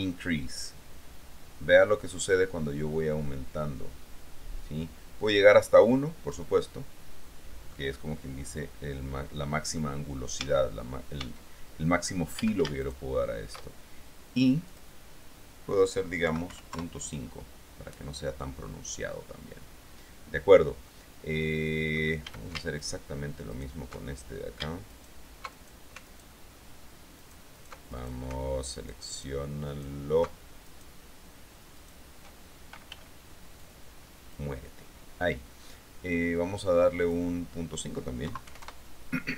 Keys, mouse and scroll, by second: 0.3-7.2 drag, 7.9-10.4 middle drag, 10.6 Tab, 11.4 Tab, 12.5 a, 13.0 alt+shift+right click, 14.9 click, 16.5 KP_Decimal, 16.7 KP_5, 21.1-22.5 middle drag, 22.5 a, 23.0-24.0 alt+shift+right drag, 25.1 alt+shift+right click, 26.3 alt+shift+right click, 27.4 alt+shift+right click, 27.7 alt+shift+right click, 28.9 alt+shift+right click, 29.9 alt+shift+right click, 30.9 alt+shift+right click, 31.9 shift+right click, 33.1 b, 33.9 click, 37.2 click, 38.4 KP_Decimal, 38.8 KP_Enter.